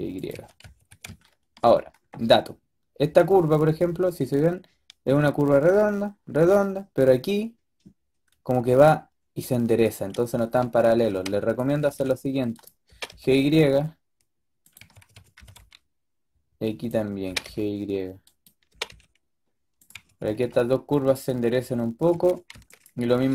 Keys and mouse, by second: 0.2 a, 0.5 a, 0.7 a, 10.5 a, 10.8 a, 11.0 b, 11.7 g, 12.8 g, 14.7 a, 15.0 a, 15.1 a, 15.2 b, 17.1 g, 18.6 g, 19.8 a, 20.1 a, 20.3 a, 22.0 a, 22.3 a, 22.4 b, 23.0 g.